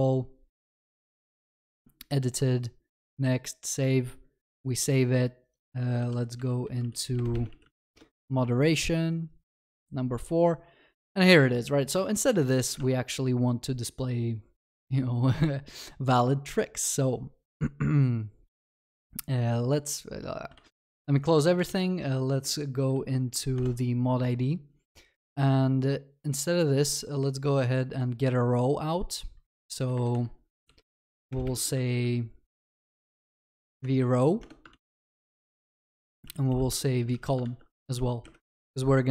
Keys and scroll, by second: 20.8 alt+w, 21.7 ctrl+shift+n, 23.6 ctrl+shift+n, 34.8 ctrl+s, 37.5 ctrl+s, 38.0 ctrl+d.